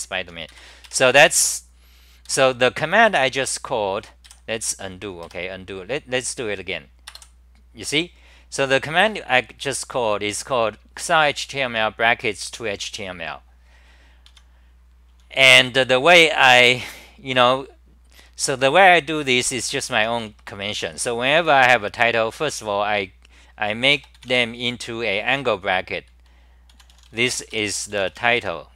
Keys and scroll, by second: 0.5 ctrl+g, 0.8 2, 2.3 ctrl+g, 4.3 f, 5.2 f, 14.3 Home, 15.1 t, 16.6 g, 16.8 g, 19.7 t, 20.0 t, 20.3 Return, 21.0 c, 26.7 u.